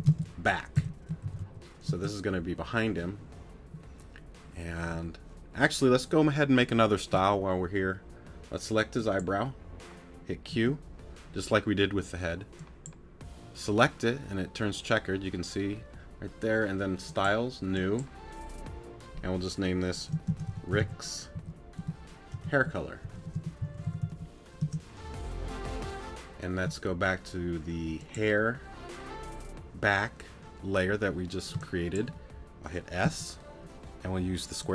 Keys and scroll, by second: 10.5 q, 31.5 space, 33.0 s.